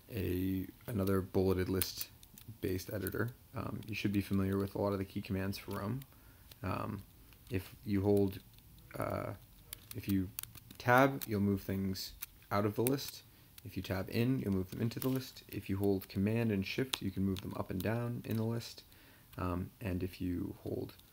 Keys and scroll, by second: 0.0 Down, 0.9 Tab, 1.3 Down, 1.8 Tab, 6.9 Down, 7.9 Up, 8.4 Down, 9.3 Up, 9.5 Up, 10.4 shift+Tab, 12.8 Tab, 16.9 shift+super+Up, 17.4 shift+super+Up, 17.8 shift+super+Up.